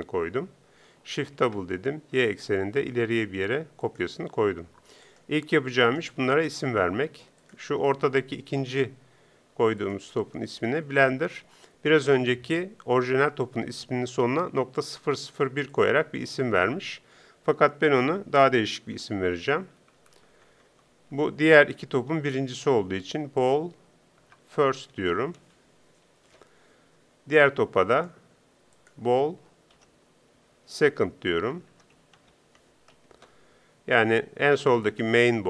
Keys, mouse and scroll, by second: 1.4 shift+d, 5.8-7.4 right drag, 19.0 BackSpace, 23.1 l, 28.0 right click, 30.5 l, 34.8-35.4 right drag.